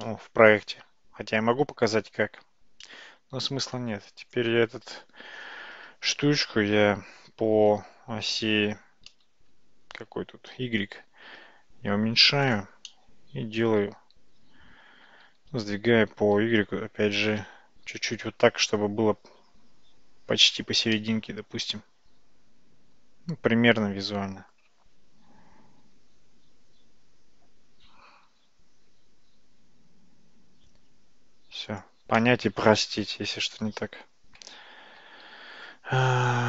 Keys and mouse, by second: 0.1-1.5 middle drag, 2.9-3.7 middle drag, 6.7 s, 12.9 middle click, 15.3 g, 21.0-24.6 middle drag, 25.9 g, 32.3-33.7 middle drag, 34.5 Tab, 35.1 Tab, 35.3 `.